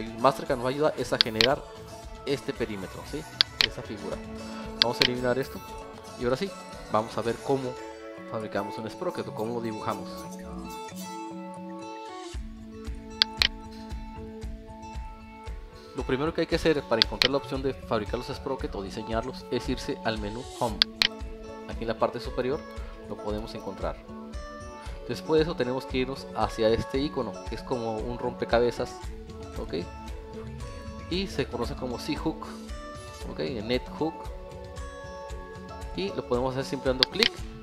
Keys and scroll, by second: 3.0 Escape, 5.8 Delete, 8.2 alt+1, 14.1 alt+e, 15.2 Escape.